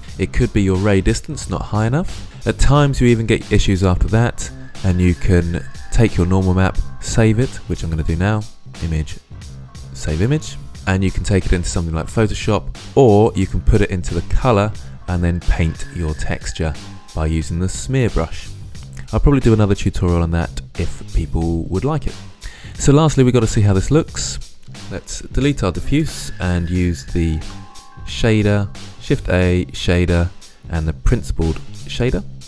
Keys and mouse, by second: 0.0 shift+space, 7.5-10.2 drag, 23.8 click, 25.8 Delete, 27.2 shift+a.